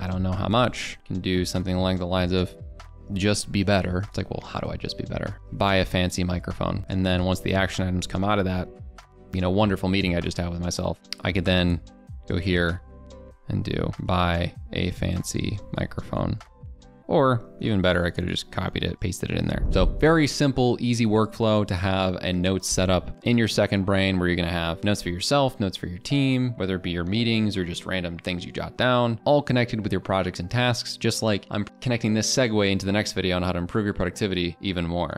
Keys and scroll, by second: 18.7 ctrl+c, 18.9 ctrl+v.